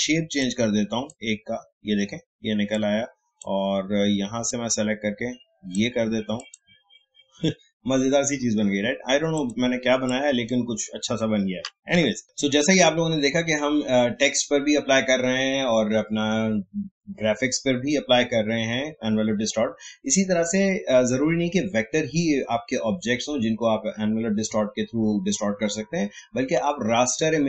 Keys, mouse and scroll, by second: 9.3-11.9 drag, 11.9 Delete, 12.2 click.